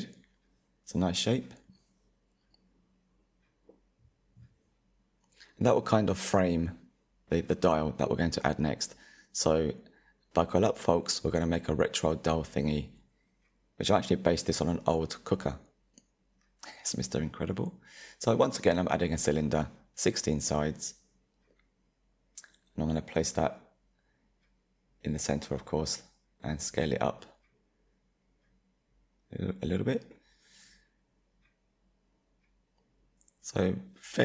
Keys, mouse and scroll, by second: 2.4-4.4 middle drag, 4.4 /, 5.4-5.9 scroll down 3, 5.9-9.2 middle drag, 9.2 shift+a, 12.2-13.1 scroll down 6, 13.1-16.1 drag, 17.5 s, 22.7-23.4 scroll up 6, 23.4-24.7 scroll up 2, 24.7-26.4 middle drag, 26.4 s, 29.0-29.7 middle drag, 29.7 scroll down 4, 30.4 click, 31.5 s, 34.1 ctrl+a.